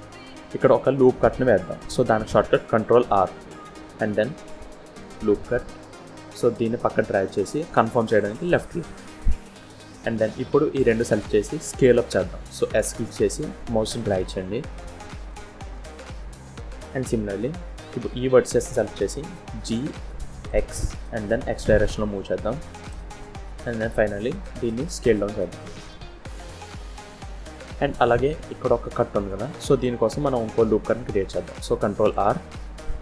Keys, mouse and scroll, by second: 3.2 ctrl+r, 10.1 click, 12.5 s, 17.8 click, 19.4 g, 24.2 s, 31.9 ctrl+r.